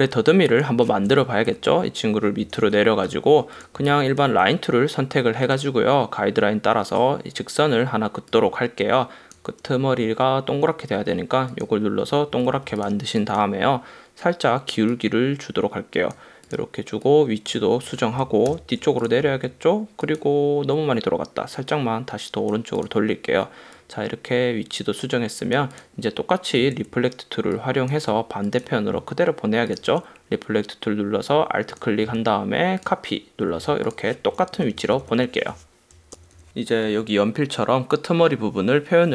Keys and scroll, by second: 1.7 shift+Down, 2.9 super+-, 4.0 space, 12.5 v, 18.8 shift+super+], 19.3 space, 26.8 space, 33.6 v, 34.7 super+-, 36.3 super+=.